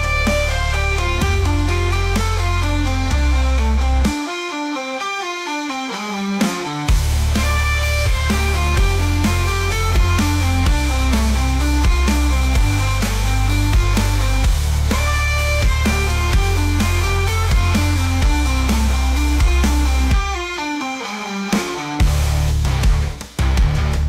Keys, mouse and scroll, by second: 1.3 g, 4.2 click, 5.0-6.3 drag, 6.6-7.0 scroll down 4, 7.0-7.9 middle drag, 7.9 scroll up 4, 8.3 click, 8.8 g, 11.9 s, 18.4-18.8 middle drag, 18.8-19.4 scroll up 1, 19.4 g, 21.5 ctrl+s, 21.9 scroll down 1, 22.1-22.6 middle drag, 22.6 click, 23.2 scroll up 1, 23.4-23.8 middle drag, 23.8-24.0 scroll up 4.